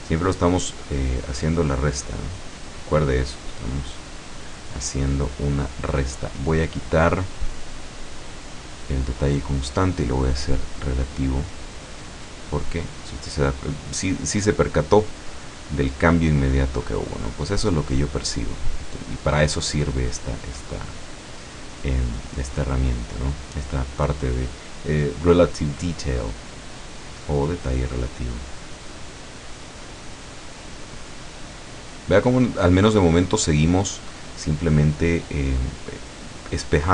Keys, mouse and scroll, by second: 1.4-4.1 drag, 4.4 click, 4.8 middle click, 6.3-7.1 scroll down 1, 8.4 click, 9.5 click, 10.0 middle click, 11.3-15.5 drag, 15.6-18.1 drag, 20.8 middle click, 22.4-23.4 drag, 27.6-28.8 drag, 30.0 click, 31.3-33.9 drag, 34.3-35.5 drag, 36.8 click.